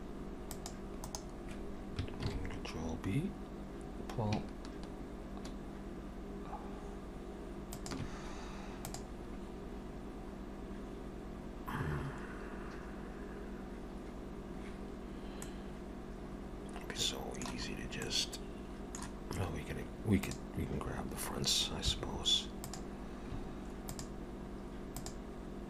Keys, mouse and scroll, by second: 2.3 ctrl+b, 15.5 middle click, 17.7 scroll up 2, 18.1 middle click, 20.2 click, 21.8 3, 22.7 click, 23.9 shift+click.